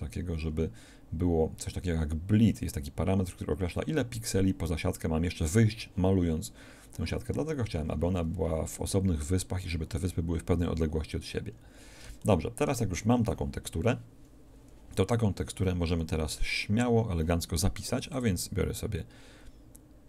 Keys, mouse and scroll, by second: 7.8-8.5 scroll down 2, 7.8 middle click, 11.4-12.0 scroll down 1.